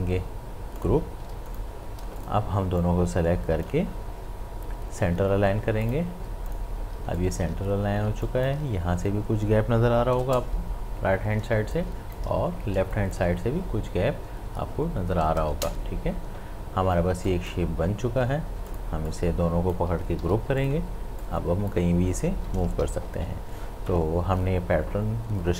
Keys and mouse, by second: 0.8 shift+click, 1.3 shift+space, 1.5-5.8 ctrl+drag, 6.9 space, 7.2 ctrl+click, 8.1 space, 8.3 ctrl+click, 11.4 space, 11.8 ctrl+click, 12.8 space, 13.0 ctrl+click, 18.1 ctrl+z, 18.7 click, 20.2 ctrl+g, 20.6-22.7 drag, 22.7 ctrl+z.